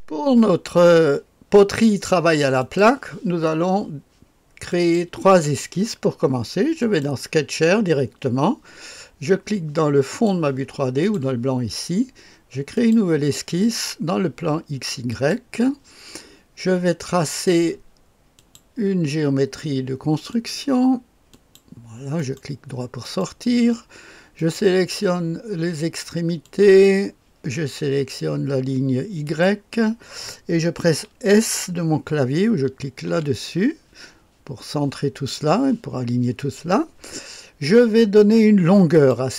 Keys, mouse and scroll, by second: 2.5 click, 4.6 click, 6.7 click, 10.0 click, 11.0 click, 12.7 click, 15.0 click, 17.2 click, 18.3 click, 20.2 click, 21.3 click, 22.1 middle click, 22.7 right click, 23.0 middle click, 23.6 right click, 24.3 click, 26.4 click, 29.2 click, 33.0 s, 38.9 click.